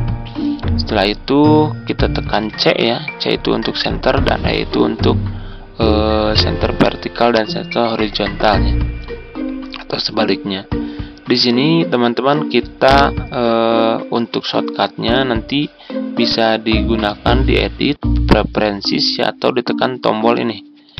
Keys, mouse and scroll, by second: 2.3 c, 16.2-20.9 drag.